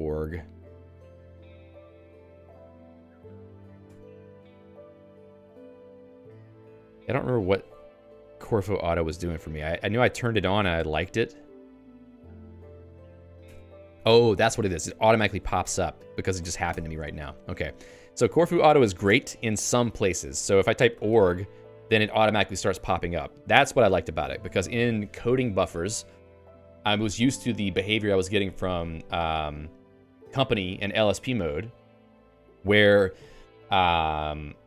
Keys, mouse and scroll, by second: 0.0-0.6 typing, 0.7 Return, 2.6-4.0 typing, 10.9 l, 11.3 ctrl+alt+x, 12.7 ctrl+g, 13.3 ctrl+g, 16.5 ctrl+alt+x, 21.5 g.